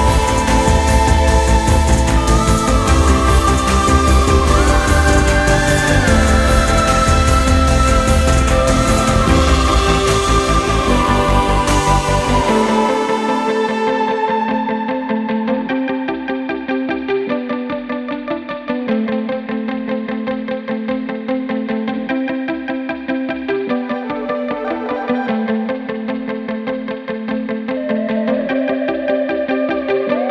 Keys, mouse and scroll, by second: 1.8-4.3 drag, 4.3 Tab, 5.4 ctrl+a, 10.8-12.2 drag, 13.3 click, 14.4-15.5 drag, 15.5 Tab, 18.7-30.3 drag.